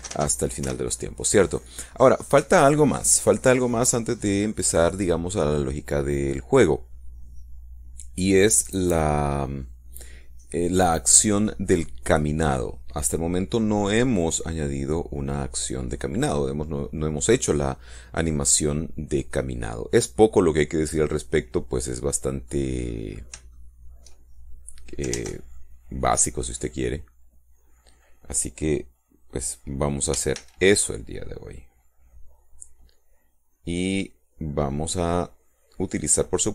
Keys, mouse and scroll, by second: 0.2 space, 1.4 Escape, 20.7-23.6 middle drag, 23.6-24.0 scroll up 2, 24.0 shift+middle click, 25.9 ctrl+Tab, 25.9 ctrl+middle click, 30.9 a, 35.4-36.5 middle drag.